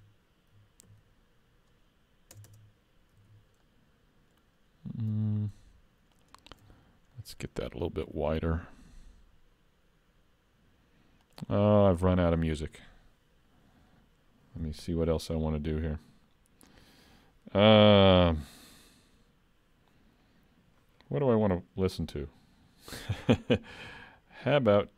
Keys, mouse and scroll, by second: 0.9 ctrl+r, 3.3 alt+a, 3.7 middle click, 5.3 alt+click, 6.2 alt+shift+click, 6.9 scroll up 1, 7.2 middle click, 8.1 s.